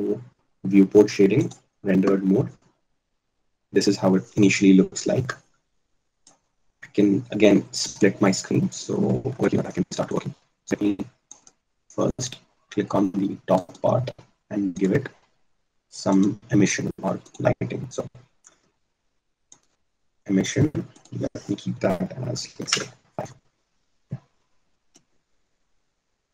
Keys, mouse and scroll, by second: 7.5-10.2 drag, 12.0-13.2 drag, 23.2 click.